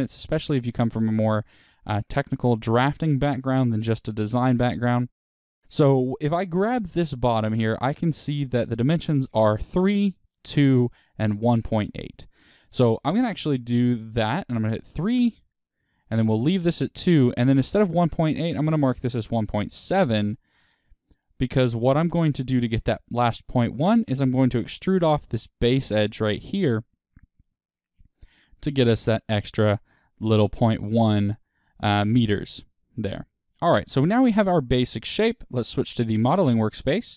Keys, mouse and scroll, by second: 2.6-3.0 scroll up 1, 12.2 click, 12.3-13.7 middle drag, 13.7-16.0 drag, 16.0 middle click, 16.8-20.2 drag, 19.3 KP_Enter, 20.2-35.9 middle drag, 32.1 KP_1, 36.7-37.1 middle drag.